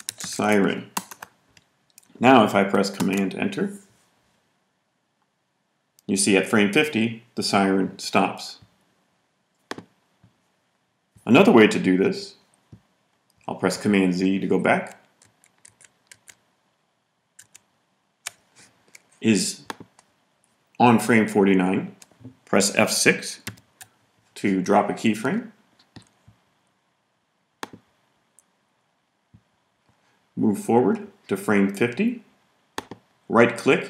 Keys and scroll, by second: 0.0-0.9 typing, 2.9 super+Return, 14.6 super+z, 15.2 super+z, 15.6 super+z, 23.4 F6.